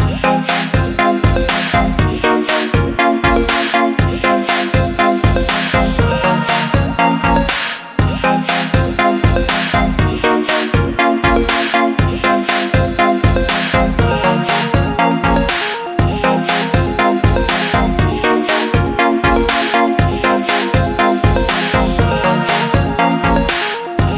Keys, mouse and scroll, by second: 6.0 a, 6.6 click, 8.3 i, 9.3 click, 10.1 a, 10.5 click, 11.7 i, 12.0 click, 12.3 a, 15.1 click.